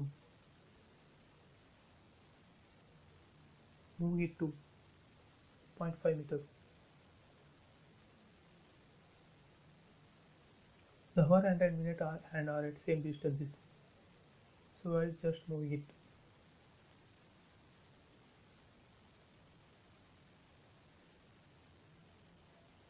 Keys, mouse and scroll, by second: 0.6 click, 0.8 space, 1.0 scroll down 1, 2.7 m, 2.8 click, 4.0 Right, 4.5-5.7 typing, 5.2 Return, 6.5 click, 6.8-7.1 scroll down 1, 7.7-8.1 scroll down 1, 10.5 click, 10.7 scroll down 1, 13.1 m, 13.3 click, 14.8 Right, 16.1-16.9 typing, 16.5 Return, 17.9 m, 18.0 click, 18.1 click, 19.3 Right, 20.0-20.6 typing, 20.2 Return, 21.4 scroll down 1.